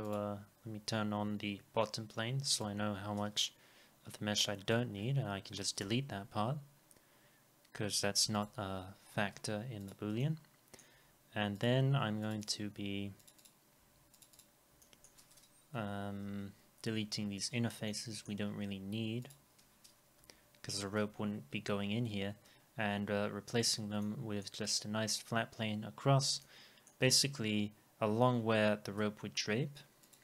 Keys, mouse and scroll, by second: 5.8 Delete, 9.0-9.3 scroll up 1, 12.3 ctrl+click, 12.5 ctrl+double click, 13.3 ctrl+click, 13.4 ctrl+double click, 14.3 ctrl+double click, 14.8 middle click, 15.7 Delete, 17.9 alt+middle click, 18.5 scroll up 1, 20.2 Delete, 22.6 scroll down 1, 24.0 alt+middle click, 26.4 alt+middle click, 28.5-28.8 scroll up 1.